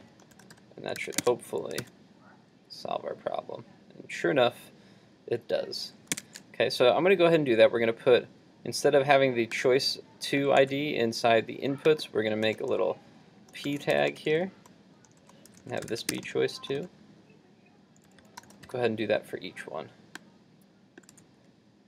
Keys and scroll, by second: 1.0 super+s, 1.4 super+Tab, 1.8 super+r, 6.2 super+Tab, 10.6 super+x, 12.9 super+x, 21.2 super+x.